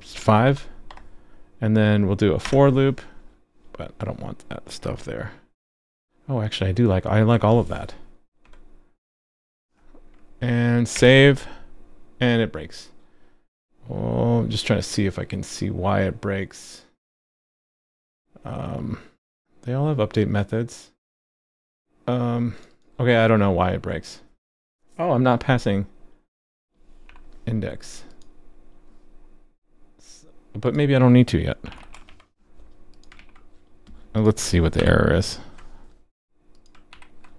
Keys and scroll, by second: 10.9 super+s, 33.1 super+s, 34.8 alt+super+j, 36.9 super+b.